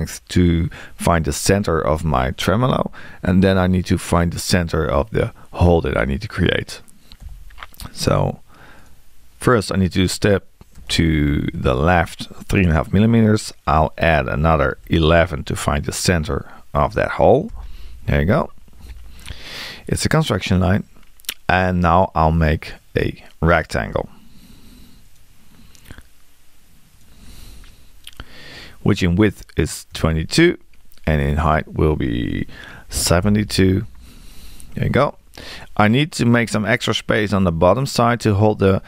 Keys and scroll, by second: 7.2 l, 10.8 3, 17.5 Return, 29.9 2.